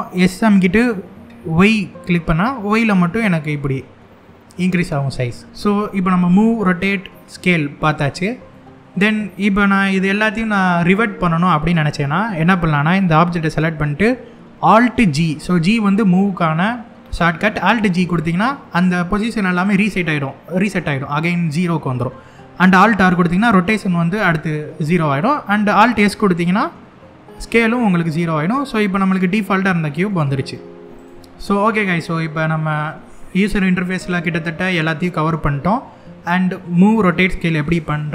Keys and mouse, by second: 1.1 y, 8.2-8.7 shift+middle drag, 17.4 alt+g, 22.7 alt+r, 26.0 alt+s, 28.2-28.7 shift+middle drag, 29.3-29.7 middle drag, 30.7 click.